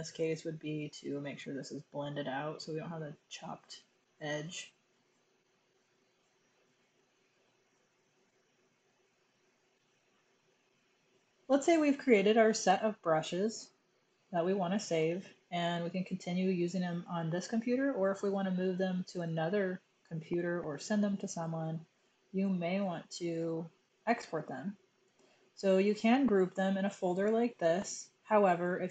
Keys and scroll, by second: 1.8 typing, 5.2 typing, 7.4-9.3 typing.